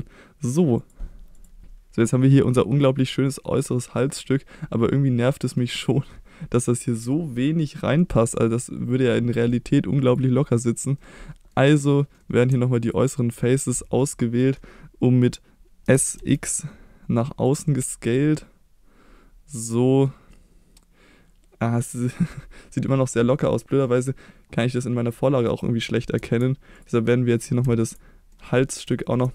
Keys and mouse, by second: 2.0-3.4 middle drag, 4.2-5.5 middle drag, 8.0-9.5 middle drag, 10.0 click, 11.0 middle click, 12.2 middle click, 12.8 ctrl+click, 14.1 middle click, 15.8 s, 16.1 x, 17.4 click, 17.8-20.0 middle drag, 20.3-22.0 middle drag, 24.7 middle click, 25.5 middle click, 26.2 Tab, 26.7 click, 27.6 Tab, 28.3 middle click, 28.9 shift+middle click.